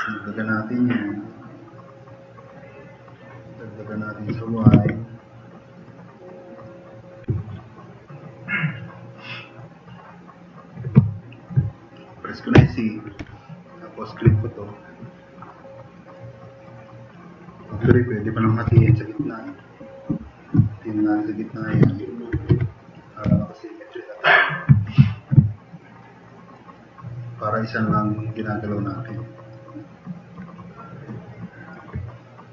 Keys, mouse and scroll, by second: 4.7 ctrl+z, 7.5-8.4 drag, 8.8-9.6 drag, 9.6 click, 11.0-11.4 drag, 12.9 c, 13.2 c, 14.2-15.0 drag, 18.4-19.2 typing, 21.4 click, 22.4 e, 22.5 e, 22.8 click, 23.0 click, 23.3 f, 23.4 click, 26.2 drag, 27.4 drag, 28.0 click, 28.7 drag, 29.4 click, 29.6 click, 29.9 click, 30.0 click, 30.6-31.0 drag, 31.2-31.6 drag.